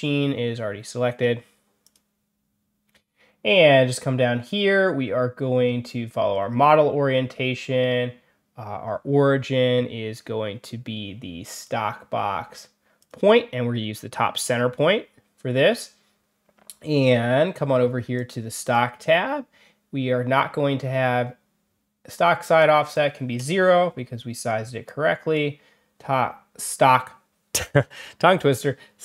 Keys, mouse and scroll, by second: 1.7 click, 11.5 click, 12.9 click, 18.1 click, 18.5 click, 22.5 click, 24.8 click.